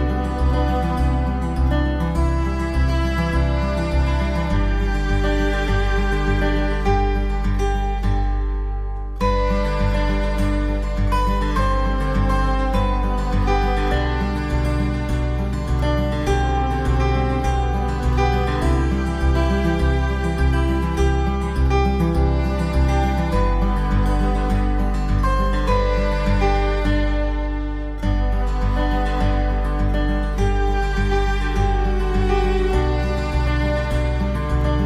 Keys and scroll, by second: 12.1 ctrl+z, 29.6 ctrl+z.